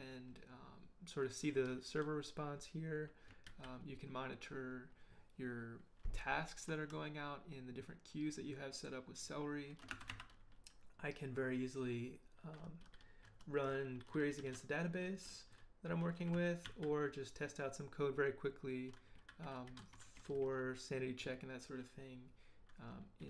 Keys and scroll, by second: 3.5 ctrl+j, 9.9 ctrl+b, 10.1 ctrl+n, 16.6 ctrl+j.